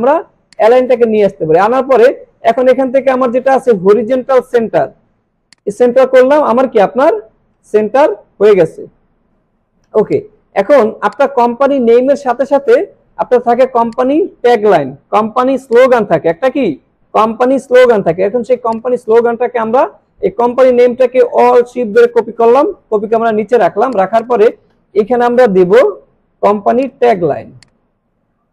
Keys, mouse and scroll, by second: 0.7 click, 5.5 click, 10.1 click, 11.9 alt+scroll down 1, 12.2 space, 12.7 click, 12.8-13.3 space, 13.4 alt+scroll up 1, 13.7 space, 13.9 click, 15.7 click, 18.5 alt+Num_Lock, 18.5 click, 18.7-23.9 alt+drag, 26.8 click, 27.6-28.3 drag.